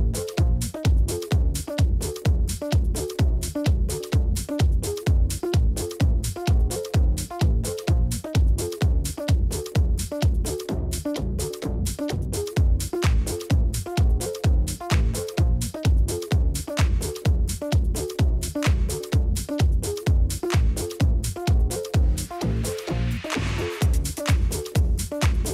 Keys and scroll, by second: 1.2 ctrl+v, 3.6 ctrl+c, 5.0 ctrl+v, 7.3 ctrl+d, 9.9-13.7 typing, 15.8 ctrl+d, 17.1 k, 23.6-24.5 typing, 25.0 Escape, 25.3 Escape.